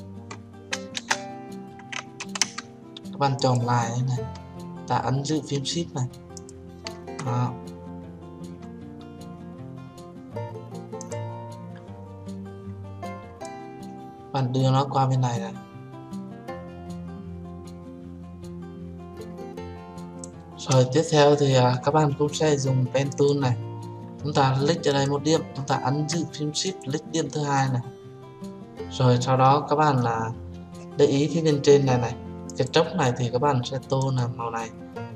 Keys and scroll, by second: 1.3 Return, 2.7 ctrl+z.